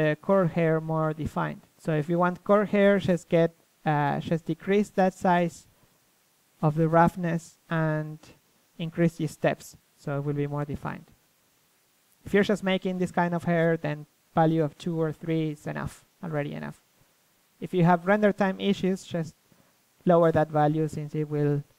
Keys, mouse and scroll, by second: 0.0-1.9 drag, 6.1 click, 6.5 middle click, 6.8-11.9 drag, 11.9-13.6 middle drag, 14.1-17.5 drag, 17.1 a, 18.2 a, 19.5 KP_3.